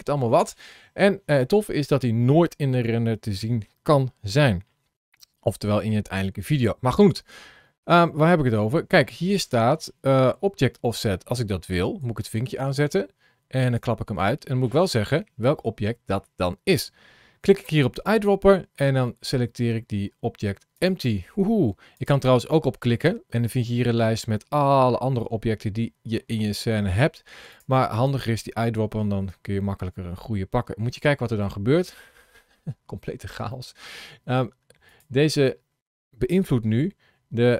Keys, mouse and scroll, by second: 3.1 middle click, 6.8 click, 11.6 click, 13.4 click, 17.7 click, 21.7 click, 29.2-29.9 scroll down 4, 30.3-31.3 scroll down 7, 31.6-31.9 scroll down 4, 31.9-33.2 scroll up 9, 33.4 middle click, 34.0 scroll down 1, 34.8 click, 36.2 g.